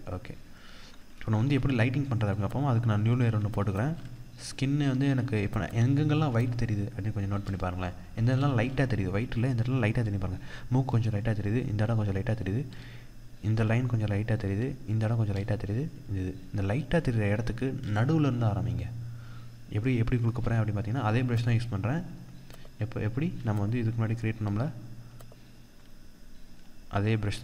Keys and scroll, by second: 0.9 ctrl+=, 3.4 ctrl+space.